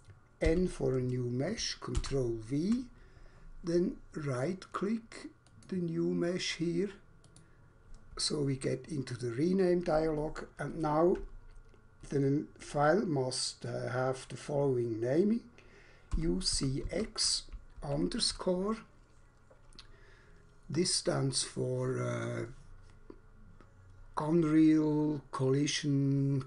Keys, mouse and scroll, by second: 0.5 n, 2.0 ctrl+v, 5.5 right click, 7.3 click, 15.9-17.7 typing.